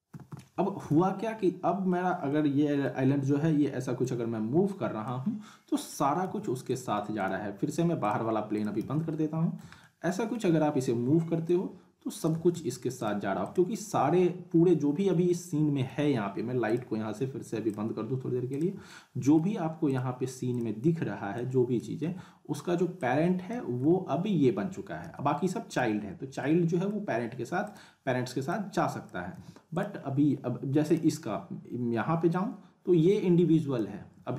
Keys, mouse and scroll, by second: 0.1 w, 1.3 scroll down 1, 1.4-2.0 alt+middle click, 2.0 scroll up 1, 2.3-2.9 middle drag, 4.0-5.3 click, 5.2-5.7 scroll down 2, 5.7 middle click, 6.3 ctrl+z, 6.6 click, 8.0 click, 8.8 z, 9.1-9.7 alt+middle drag, 11.5-12.4 click, 12.5 ctrl+z, 13.0 click, 15.2-15.9 alt+middle drag, 16.7 click, 19.9 click, 22.0 z, 23.0-23.6 click, 23.8 ctrl+z, 25.0 z, 25.7 click, 26.0-26.4 scroll up 1, 26.4-27.0 middle click, 27.3-27.6 scroll down 1, 27.6 click, 29.3 z, 29.7 click, 30.0 scroll up 1, 30.9-33.8 drag, 34.2 ctrl+z.